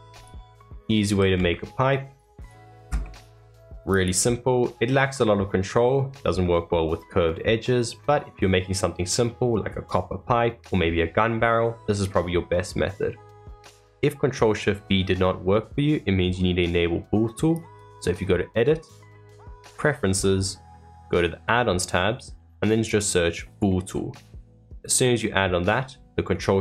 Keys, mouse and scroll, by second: 0.1 click, 0.7-1.0 middle drag, 1.0 s, 3.0-3.9 middle drag, 3.9 click, 4.5-7.6 middle drag, 11.5-14.5 middle drag, 17.5-26.6 drag.